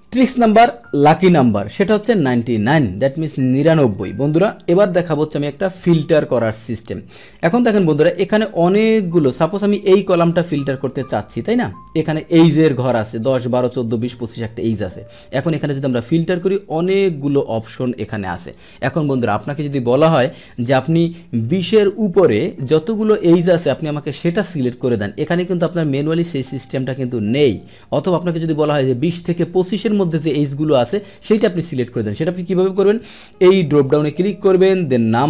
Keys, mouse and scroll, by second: 3.6 click, 6.2 ctrl+shift+l, 9.4 click, 10.4 click, 15.2 click, 18.4 click, 18.9 click, 25.0 click, 27.6 click, 28.6 click, 31.2 click, 33.7 click.